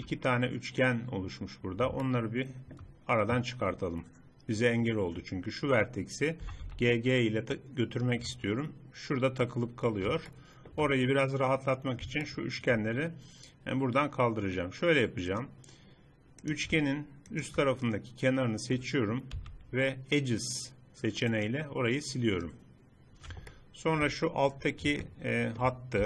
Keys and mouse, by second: 2.6-6.5 middle drag, 6.5 g, 10.4-12.2 middle drag, 12.4 middle click, 12.8-14.2 drag, 15.4-16.5 drag, 16.5 middle click, 17.4-19.2 drag, 19.6 x, 23.6-25.2 middle drag, 25.5 click.